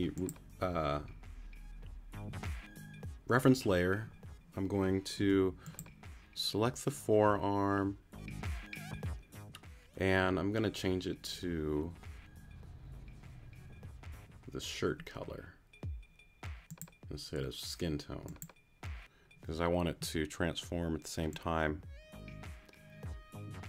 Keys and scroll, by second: 5.2 q.